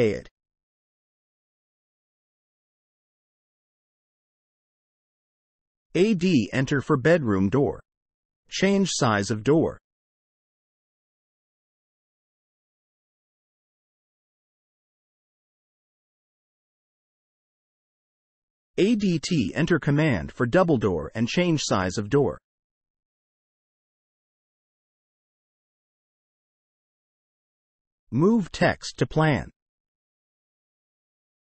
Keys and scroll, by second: 4.9 Escape, 6.3 a, 6.9 space, 10.7 3, 15.1 Escape, 16.7 a, 16.8 space, 17.6 Escape, 19.5 a, 20.6 d, 21.3 space, 26.2 Escape, 27.4 c, 27.5 space, 28.5 Escape, 29.0 c, 29.1 space, 30.4 Escape, 31.1 c, 31.2 space.